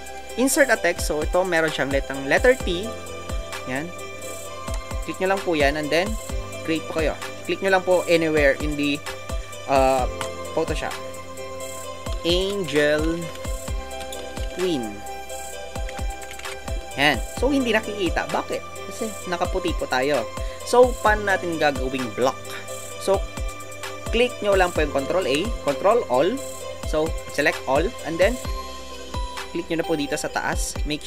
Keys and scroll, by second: 12.5 shift+a, 16.8 typing.